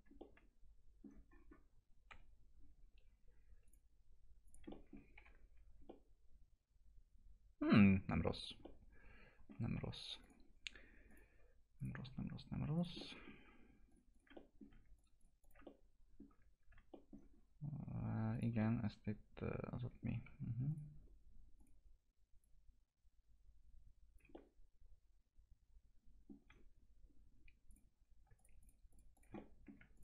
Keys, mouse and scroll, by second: 0.2 alt+middle click, 1.3-1.9 scroll up 1, 1.9 scroll down 1, 2.1 p, 2.6-3.7 scroll down 1, 3.7 click, 4.7 alt+middle click, 5.2 F4, 5.8 scroll down 1, 5.9 alt+middle click, 7.9-8.6 scroll up 1, 8.6 alt+middle click, 9.8 F4, 10.2 click, 13.0 alt+middle click, 13.9 ctrl+click, 14.3 alt+middle click, 15.0 ctrl+click, 15.6 alt+middle click, 17.4 scroll up 1, 18.3 click, 18.6-20.2 alt+middle drag, 20.2 1, 20.7-24.3 drag, 24.3-27.7 alt+middle drag, 27.7 click, 28.4 ctrl+click, 29.3 alt+middle click, 29.9 ctrl+click.